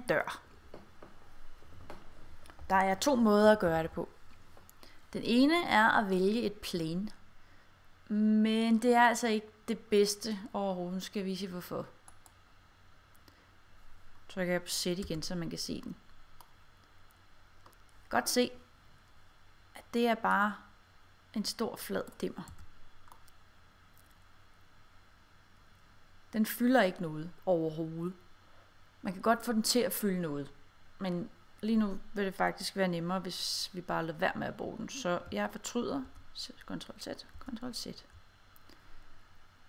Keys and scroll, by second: 22.5 z, 36.1 super+z, 37.4 super+z.